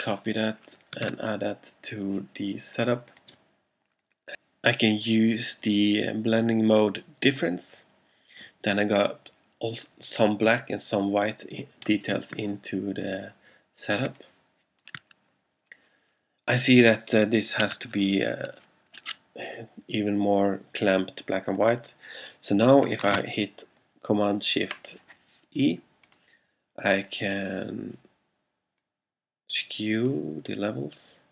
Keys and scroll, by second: 1.1 super+v, 14.1 alt+space, 23.3 shift+super+e.